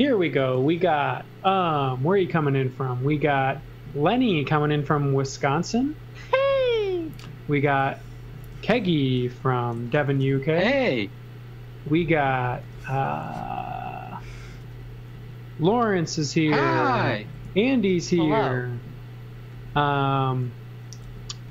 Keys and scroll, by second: 0.4 a, 1.4 a, 8.4 space, 8.7 a, 9.7 z, 10.1 x, 12.5 x, 13.0 z, 14.5 space, 15.1 s, 17.4 a, 20.2 space, 21.0 s.